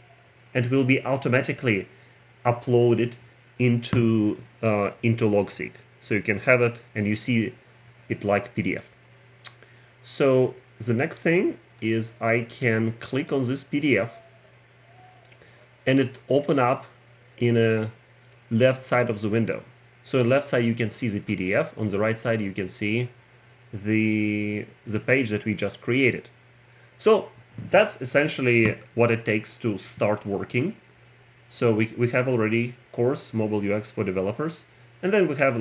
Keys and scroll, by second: 6.2 Return.